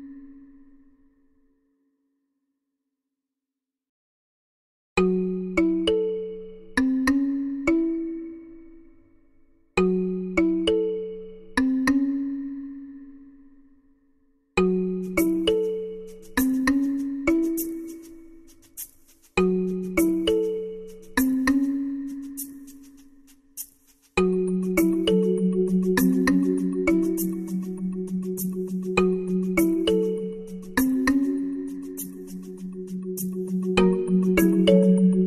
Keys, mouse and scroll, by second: 8.6 shift+z, 10.9 shift+a, 16.1 z, 16.8-18.4 drag, 24.6 s, 30.7 z, 31.2 z, 32.9 m.